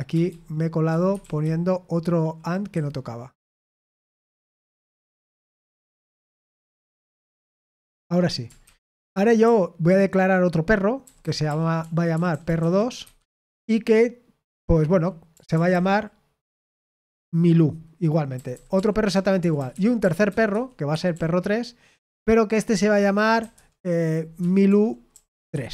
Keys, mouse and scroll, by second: 0.2-14.9 typing, 1.1 Escape, 18.3-22.0 typing, 23.3-25.7 typing, 24.3 Escape.